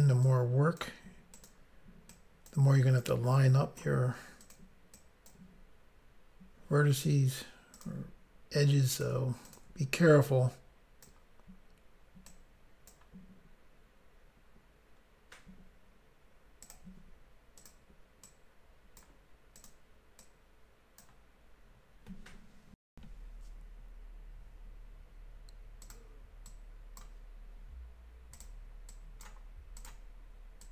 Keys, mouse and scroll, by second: 0.2 click, 1.3 click, 1.5 click, 2.1 click, 3.0 click, 4.4 click, 4.5 click, 4.9 click, 7.7 click, 7.8 click, 8.9 click, 9.0 click, 9.4 shift+click, 9.6 shift+click, 10.2 click, 12.3 click, 16.7 click, 17.6 click, 18.3 click, 19.6 click, 19.7 click, 20.2 click, 22.9 Insert, 23.3 Pause, 25.8 click, 25.9 click, 26.4 click, 28.3 click, 28.4 click, 28.9 click, 29.7 click, 29.8 click, 30.6 click.